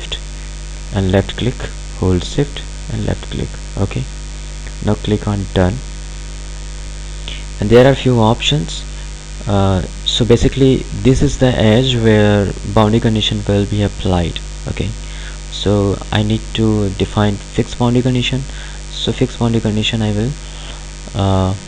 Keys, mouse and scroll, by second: 0.5 shift+click, 5.4 click, 19.9 click.